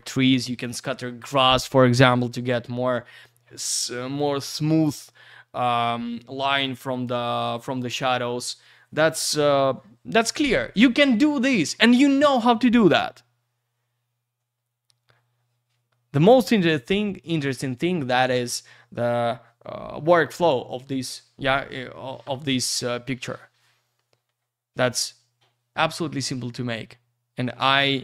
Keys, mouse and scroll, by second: 27.8 click.